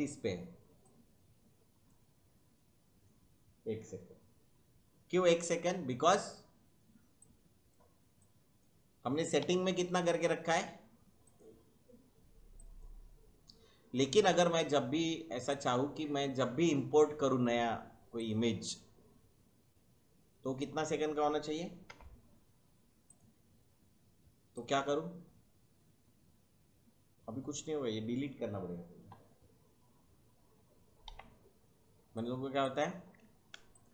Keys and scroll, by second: 9.4 Delete, 21.8 5, 31.0 Delete.